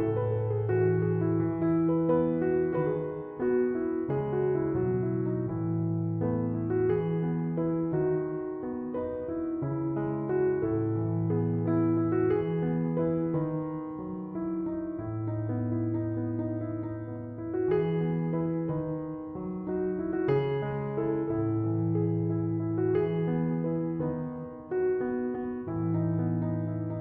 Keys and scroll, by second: 11.7-12.6 typing.